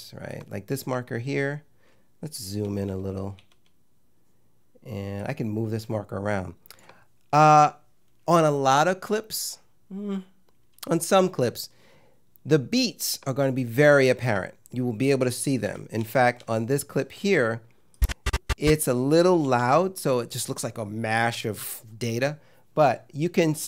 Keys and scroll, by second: 2.7 =, 15.7 -, 19.5 =.